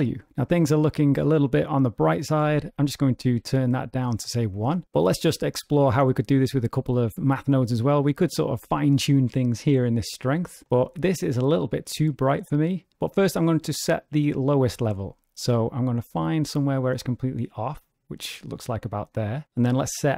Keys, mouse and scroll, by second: 1.9 click, 6.1 click, 15.4 click.